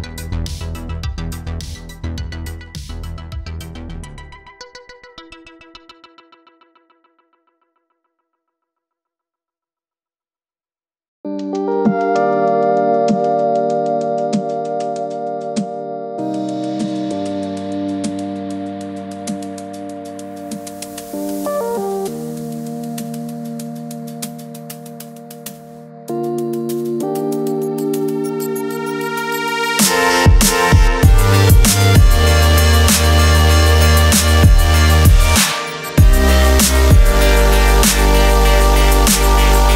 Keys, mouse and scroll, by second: 2.8 click, 5.0 click, 5.4 Escape, 6.1 right click, 6.3 click, 10.6 click, 12.7 z, 13.1 click, 17.4 ctrl+z, 17.6 click, 22.2 click, 25.1 click, 26.3 click, 27.4 BackSpace, 27.6 click, 28.8 click, 30.5 ctrl+z, 31.0 click, 32.9 ctrl+z, 33.1-34.8 typing, 33.4 click, 35.6 click, 39.6 click.